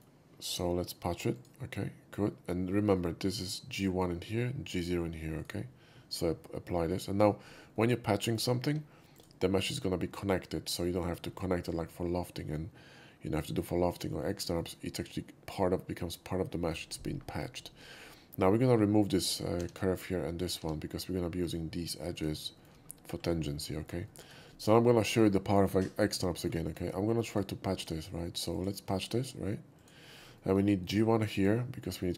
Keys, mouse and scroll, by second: 1.4 shift+click, 3.3 click, 5.4 right click, 7.5 scroll down 1, 7.8-8.4 middle drag, 8.8 2, 9.2 click, 14.4 middle click, 19.1 click, 19.7 x, 20.4 click, 20.4 x, 21.5 click, 22.2 click, 22.6 shift+middle click, 22.9 shift+scroll up 2, 23.8 shift+middle click, 24.1 shift+middle click, 24.6 shift+middle click, 26.4 shift+middle click, 26.7 shift+middle click, 27.4 alt+click, 27.8 alt+click, 28.6 alt+click, 29.8 alt+click, 30.2 alt+middle click, 30.4 shift+middle drag, 31.4 shift+click.